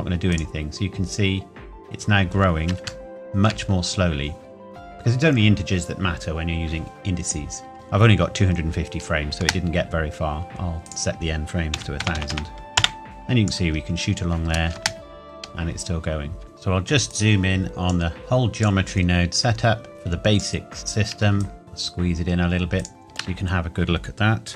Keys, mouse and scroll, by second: 0.3 click, 2.3 scroll up 1, 3.0 shift+middle click, 3.1 shift+middle click, 3.7 scroll up 1, 7.7 scroll, 9.4 space, 10.8 click, 11.8 KP_1, 12.0 KP_0, 12.8 KP_Enter, 13.0 click, 13.8-14.2 scroll down 1, 14.9 space, 16.4-17.1 scroll down 1, 17.1 click, 21.4 shift+click, 21.6 g, 22.8 click, 23.0 shift+middle click.